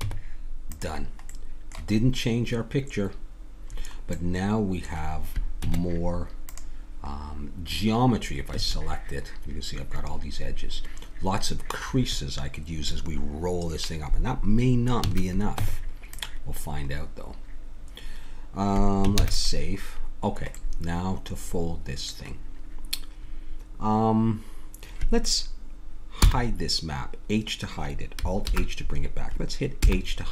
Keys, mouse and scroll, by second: 0.0 Tab, 4.1-10.2 middle drag, 5.6 Tab, 8.5 a, 15.0 a, 15.6 Tab, 20.2 ctrl+s, 20.2 middle click, 26.2 h, 28.5 alt+h, 29.8 h.